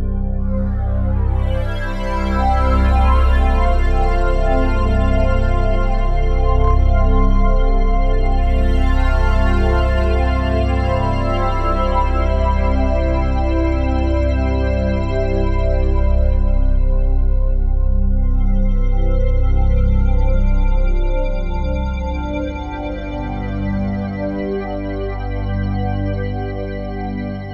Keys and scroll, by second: 9.1 ctrl+z, 9.2 ctrl+z, 9.6 ctrl+z.